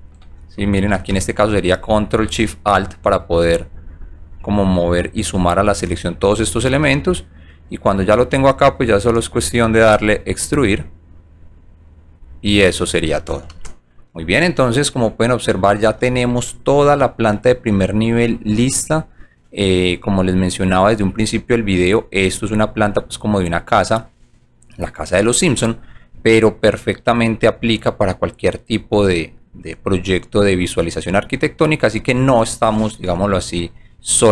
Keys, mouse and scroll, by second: 1.3 ctrl+click, 3.4 ctrl+click, 6.8-7.8 alt+drag, 8.4 alt+click, 10.2 click, 11.4 click, 14.2 shift+middle click, 14.5-15.8 alt+drag, 16.4 alt+middle click, 17.1 alt+middle click, 17.7 alt+middle click, 18.1 alt+click, 18.8 alt+middle click, 19.3 alt+right click, 19.9 alt+click, 20.9 alt+right click, 21.6 alt+middle click, 22.3 alt+right click, 22.7 alt+click, 23.2 alt+middle click, 23.9 alt+middle click, 24.3 alt+click, 25.2 alt+right click, 25.8 alt+middle click, 26.5-28.6 alt+drag, 28.9 alt+middle click, 29.7 alt+right click, 30.3-31.9 alt+drag, 33.1 alt+right click, 33.5 alt+click, 33.9 alt+middle click.